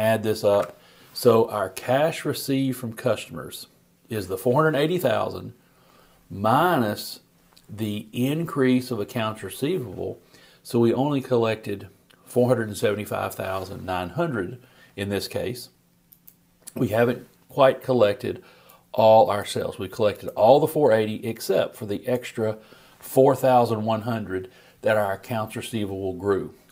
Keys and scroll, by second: 0.5 shift+super+t.